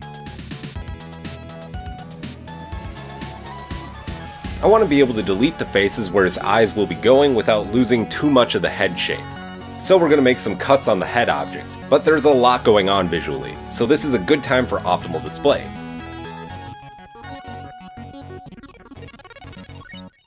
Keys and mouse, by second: 1.5 KP_1, 14.5 click, 14.6-20.2 middle drag.